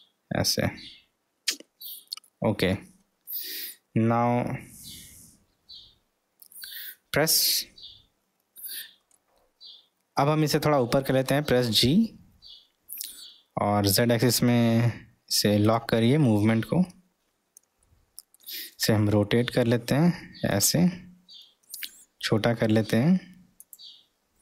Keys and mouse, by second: 2.3 middle click, 9.1-10.2 middle drag, 11.6 g, 16.2-16.9 middle drag, 17.9-18.4 middle drag, 19.1 r, 21.7 s.